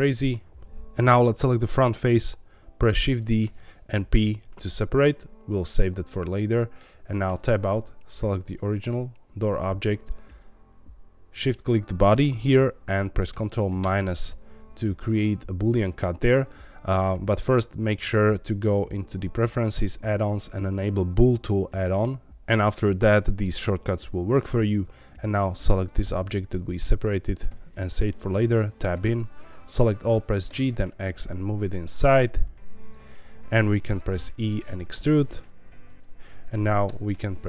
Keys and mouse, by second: 2.9 shift+d, 3.9 p, 7.2 Tab, 8.4 click, 10.2 shift+click, 13.8 ctrl+KP_Subtract, 25.0 click, 26.5 middle click, 27.7 Tab, 28.9 a, 30.4 g, 30.7 x, 32.9 click, 34.1 e, 35.8 click, 36.8 i.